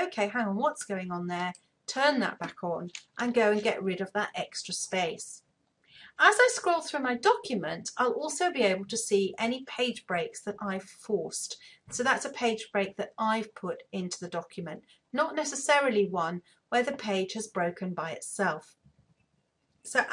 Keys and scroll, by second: 2.7 BackSpace.